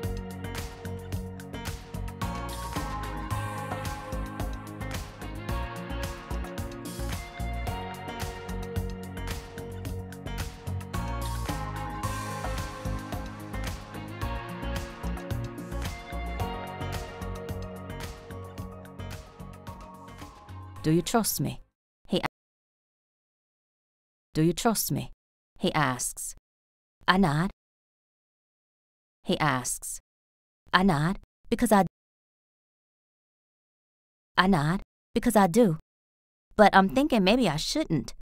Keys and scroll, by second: 1.2 ctrl+u, 5.8 t, 13.8 r, 18.9 Return, 19.1 t, 20.4 space, 22.1 space, 23.0 a, 24.0 space, 27.4 space, 28.8 space, 29.0 r, 31.5 a, 31.7 space, 32.5 s, 33.8 space, 34.9 s, 37.6 a.